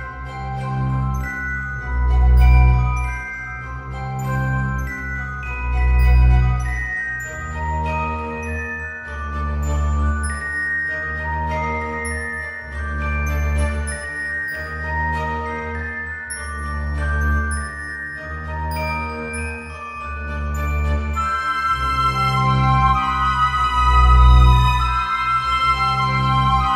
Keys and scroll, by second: 6.4 ctrl+z.